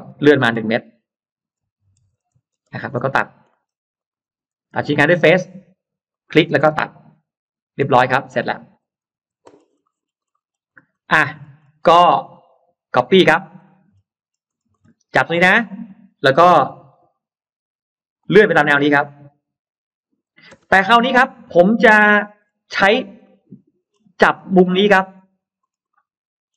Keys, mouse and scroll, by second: 0.7 click, 0.7 m, 1.9 1, 2.1 Return, 2.7 scroll up 1, 2.7 space, 3.3 middle click, 3.8 click, 4.9 click, 5.9 click, 7.1 click, 7.8 click, 7.8 space, 8.0 click, 8.7-9.7 scroll down 2, 9.0 Delete, 9.7 middle click, 9.9-10.6 scroll down 2, 10.1 middle click, 10.7-12.3 scroll up 3, 12.1 middle click, 13.1 scroll down 2, 13.5 middle click, 13.9-14.7 scroll up 2, 14.9 click, 15.5 scroll up 2, 16.6 m, 18.1 click, 20.3 space, 20.4-21.6 scroll down 2, 20.7 middle click, 21.6 middle click, 22.0-23.5 scroll down 4, 23.1 middle click, 23.9 scroll down 2, 24.3-26.0 scroll up 6, 25.8 middle click.